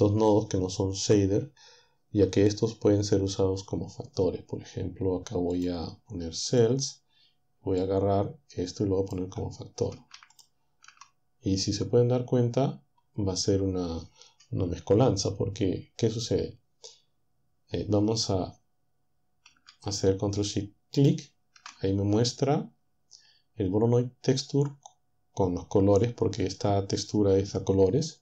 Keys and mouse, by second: 5.6 click, 6.5 click, 7.9-9.3 drag, 10.3 ctrl+shift+click, 21.0 ctrl+shift+click.